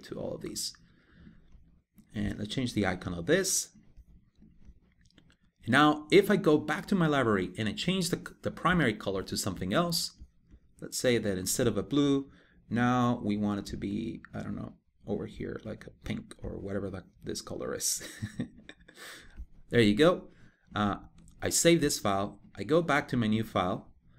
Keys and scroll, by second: 20.8 super+s.